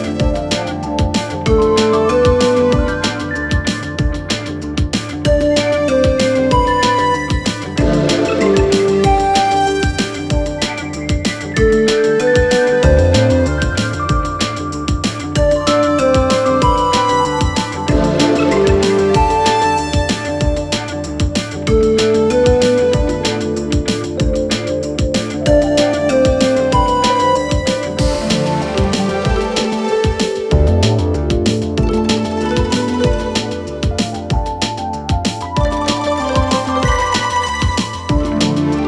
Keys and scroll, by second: 0.3 3, 4.8 4, 7.7 3, 7.8 Return, 11.0 2, 12.4 ], 18.8 f, 19.0 Return, 20.7 4, 25.5 ctrl+d, 25.7 Escape, 26.1 ,.